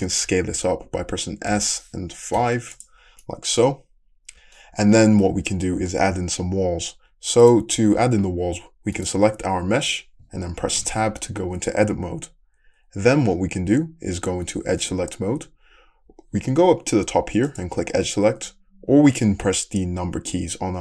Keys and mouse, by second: 2.0 s, 2.7-7.7 middle drag, 7.7-9.1 drag, 9.1-17.5 middle drag, 11.1 Tab, 17.5-20.8 drag.